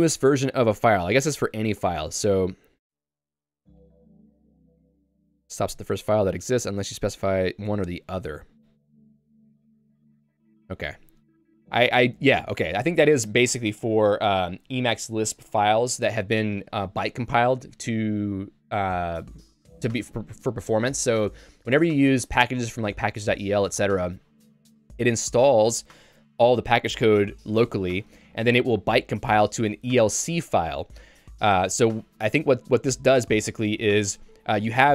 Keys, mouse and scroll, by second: 6.3 k, 7.5 j, 12.6 q.